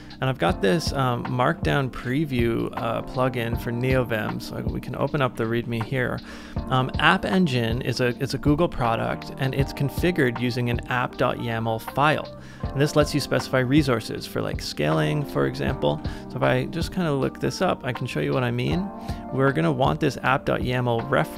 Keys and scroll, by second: 1.4-2.5 typing, 4.8 super+=, 5.0 super+=, 5.2 super+=, 5.3 super+=, 15.3 super+c, 15.6 super+t, 15.9 super+v, 16.0 Return.